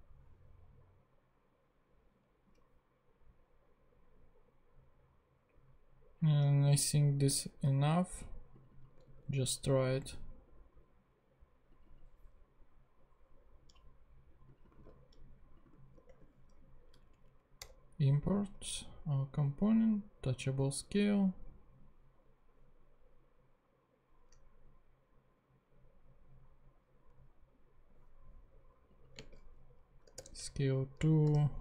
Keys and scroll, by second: 9.0 super+c, 14.8 super+v, 15.7 alt+super+v, 15.9 alt+super+Return, 17.1 alt+Down, 17.6 Return, 29.2 space, 30.2 Return, 31.1-31.6 typing.